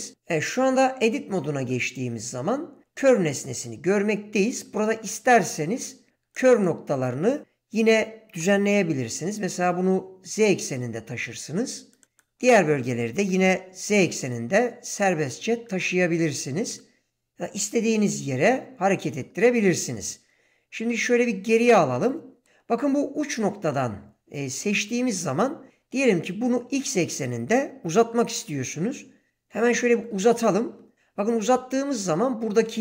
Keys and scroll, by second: 1.0 Tab, 8.3 g, 9.1 z, 13.2 g, 14.1 z, 17.5 g, 20.8 ctrl+z, 28.0 g, 30.0 x.